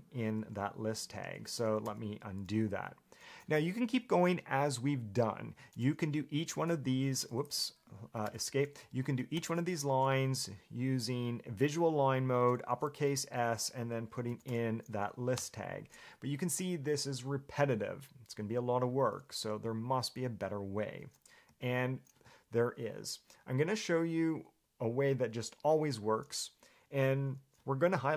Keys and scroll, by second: 1.4 Escape, 2.0 u, 6.9 b, 8.3 Escape, 8.4 u, 9.7 shift+v, 14.1-15.1 typing, 15.6 Return, 21.0 Escape, 21.7 u.